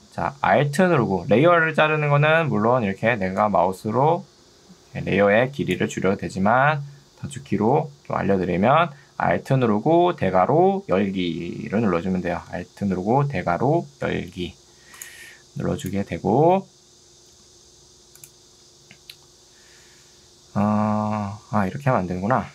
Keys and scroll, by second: 6.1 ctrl+z.